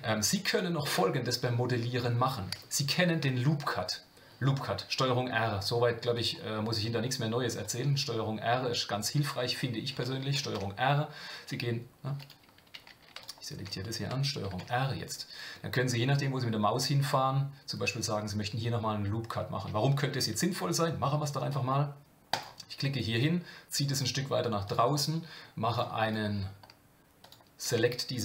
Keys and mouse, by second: 13.2 alt+click, 14.4 ctrl+r, 25.7 click, 26.0 click, 27.2 alt+click.